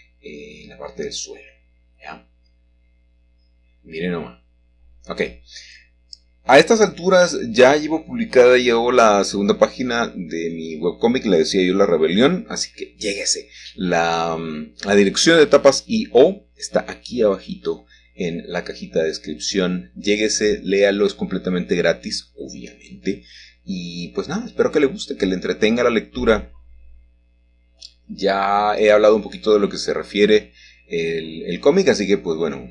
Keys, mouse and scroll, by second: 0.7 middle click, 1.7 y, 4.5 shift+click, 5.6-6.6 scroll down 1, 6.6 scroll down 1, 8.2 middle click, 11.5-13.0 shift+middle drag, 15.5 shift+d, 16.8 g, 17.5 x, 18.6 Escape, 19.6 g, 20.2 x, 22.7 click, 23.6 1, 25.6 shift+middle click, 26.5 g, 27.3 x, 31.4 shift+click.